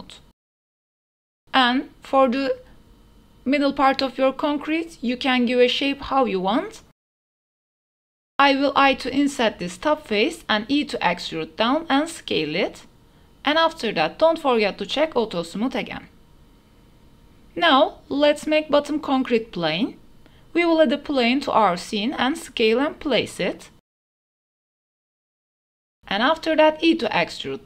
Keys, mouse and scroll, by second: 0.6 click, 0.9-1.5 middle drag, 2.0 middle click, 2.3 click, 3.3-5.8 typing, 6.8 shift+middle drag, 7.4 Tab, 8.2 ctrl+z, 8.4 Tab, 9.2 i, 11.2 e, 12.1 z, 12.4 z, 13.7 s, 15.3 Tab, 16.4 click, 17.1 click, 17.7 click, 17.9 shift+a, 17.9 shift+s, 18.1 shift+a, 19.8-20.3 drag, 21.1 s, 22.2 click, 23.0 middle click, 23.6-25.6 typing, 24.7 click, 25.2 Tab, 27.1 click, 27.4 Tab.